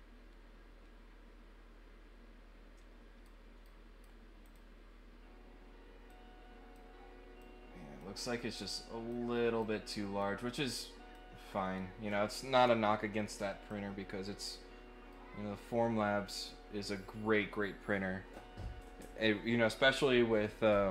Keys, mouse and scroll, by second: 3.6 right click, 4.4 click, 6.0 click, 7.4 click, 8.6 click, 9.6 click, 10.6 click, 12.1 scroll up 1, 12.6 scroll down 1, 13.7 click, 15.1-16.4 right drag.